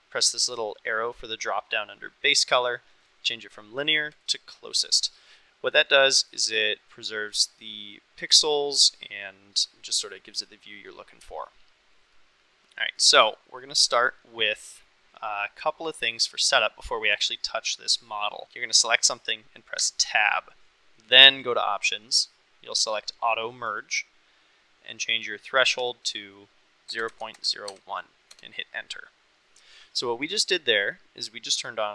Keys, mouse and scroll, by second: 1.2 click, 3.1-4.2 drag, 5.8-6.3 middle drag, 12.2-13.0 middle drag, 13.6 middle click, 19.8 Tab, 21.4-29.4 drag, 30.3 click.